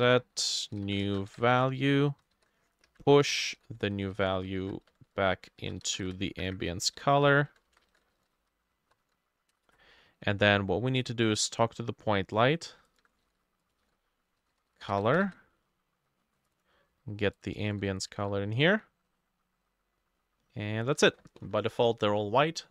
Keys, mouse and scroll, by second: 0.0-2.4 typing, 1.3-4.4 drag, 2.1 Right, 2.3 shift+middle click, 2.9 Up, 3.0 middle click, 3.1 ctrl+Left, 3.3 ctrl+shift+Right, 3.7 Down, 3.7 ctrl+c, 3.9 Down, 4.1 middle click, 4.2 ctrl+v, 4.5 middle click, 4.6 ctrl+z, 4.9 Tab, 5.1 Tab, 5.5 ctrl+middle click, 5.6 ctrl+v, 5.9 space, 6.0 =, 6.3 Up, 6.5 Up, 6.8 Down, 7.2 Left, 7.3 ctrl+shift+middle click, 7.7 Left, 7.9 middle click, 8.2 ctrl+c, 8.4 Down, 8.8 End, 8.9 ctrl+middle click, 9.1 ctrl+v, 9.5 Return, 9.7 Return, 12.8 shift+middle click, 12.9 shift+click, 13.3 ctrl+c, 13.5-15.7 typing, 13.8 middle click, 13.9 ctrl+v, 16.6 double click, 17.5 double click, 17.7 ctrl+c, 18.2 ctrl+v, 21.1 ctrl+s.